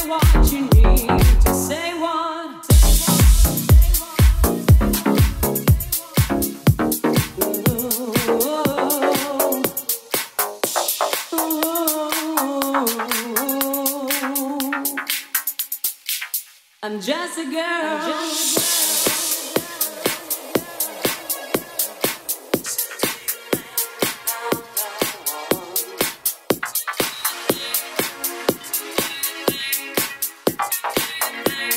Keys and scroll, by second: 0.3 Up, 0.9 Down, 1.2 Left, 2.0 Up, 2.2 Down, 2.4 Left, 2.5 Up, 2.7 Down, 3.9 Right, 5.1 Left, 5.2 Right, 5.7 Right, 5.9 Left, 6.5 Right, 9.3-10.6 typing, 17.1 BackSpace, 17.4 BackSpace, 28.2 Down.